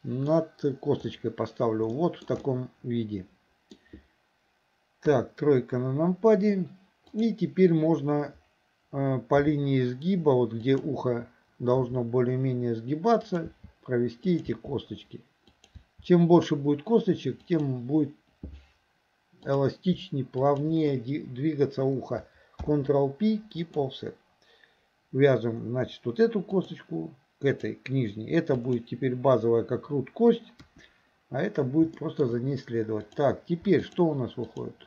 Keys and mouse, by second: 2.0 shift+middle click, 2.5-3.8 middle drag, 5.1 KP_3, 7.2 click, 9.5 g, 11.9 e, 13.5 e, 14.5 e, 15.8 e, 19.5 click, 20.4 shift+click, 22.6 ctrl+p, 26.6 click, 28.6 click, 30.7 KP_1, 32.0 shift+middle click, 33.1 click, 33.9 shift+click, 34.5 shift+click.